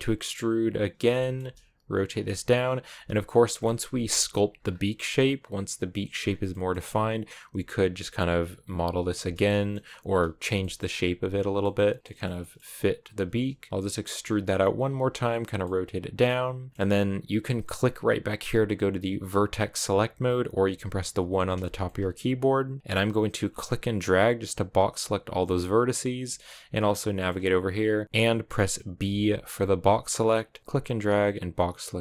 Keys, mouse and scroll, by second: 1.0 shift+middle click, 1.4 r, 2.6 g, 3.3 middle click, 3.6 r, 4.0 g, 4.4 scroll down 4, 4.6-5.9 middle drag, 5.9-6.3 scroll up 4, 6.3 middle click, 6.7 g, 7.3 r, 8.6 r, 8.9 g, 9.3 middle click, 9.8 s, 10.4 middle click, 10.7-11.0 scroll down 1, 11.0 s, 11.4 middle click, 11.9 scroll down 1, 12.0 shift+middle click, 12.4 scroll up 2, 12.6 middle click, 12.8 e, 13.9 s, 14.5 r, 14.7 g, 15.4-19.6 middle drag, 19.6-21.7 drag, 21.7 shift+middle click, 22.2-22.8 scroll up 1, 22.8-24.8 middle drag, 24.8 click, 25.2-28.0 middle drag, 28.0 ctrl+z, 31.3 b, 31.8-32.0 middle drag.